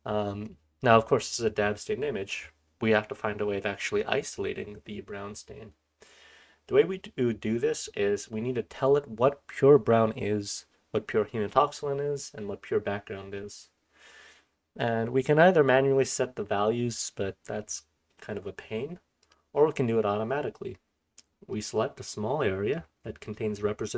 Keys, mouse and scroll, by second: 1.2-19.2 scroll down 1, 19.2 click, 19.2-21.5 scroll down 1, 21.5-22.9 drag, 21.5-22.9 scroll down 1, 22.9 scroll down 1, 23.0-23.9 scroll up 1.